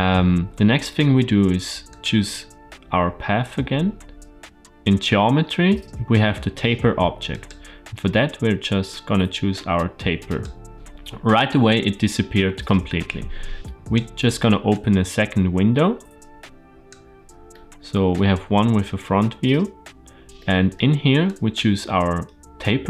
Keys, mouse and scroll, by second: 1.7 click, 7.2-10.3 drag, 13.5 click, 14.5-16.8 drag, 17.3-18.0 middle drag, 18.2-19.2 scroll up 1, 19.2-20.2 scroll up 1, 20.2 middle click, 21.1-21.4 drag.